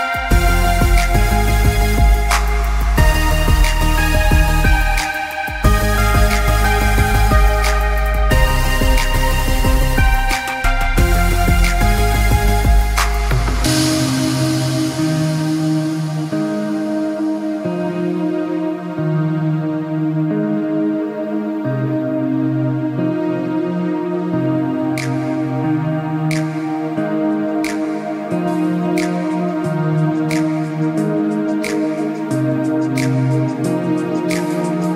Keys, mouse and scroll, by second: 2.1-3.2 scroll up 1, 9.4 shift+click, 13.1 shift+click, 20.7-21.8 scroll up 1, 24.8 shift+click, 29.3 shift+click.